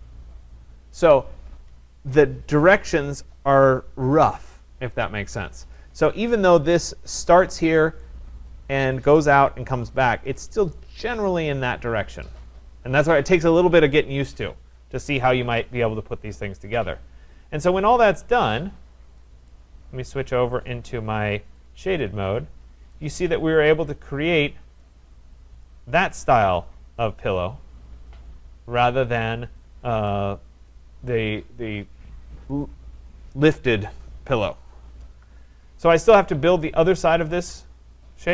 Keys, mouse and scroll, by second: 17.9 click, 19.5 right click, 20.6 click, 21.7 click, 22.5-22.8 scroll, 24.8 right click, 25.0 scroll, 25.6 click, 28.6 middle click, 29.2 right click, 29.7 middle click, 31.1 right click, 35.6 middle click, 35.7 middle click, 36.6 right click, 37.0 scroll.